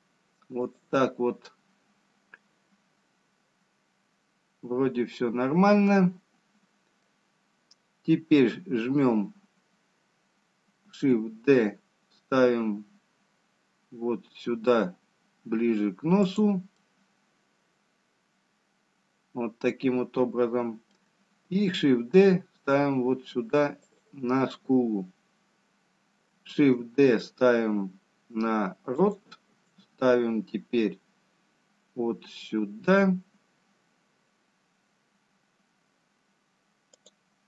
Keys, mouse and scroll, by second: 0.3 shift+d, 2.4 middle click, 7.6-8.5 scroll down 2, 11.4 shift+d, 16.9 middle click, 22.0 shift+d, 25.3-25.7 scroll down 1, 26.3 scroll up 1, 27.4 shift+d, 30.8 shift+d.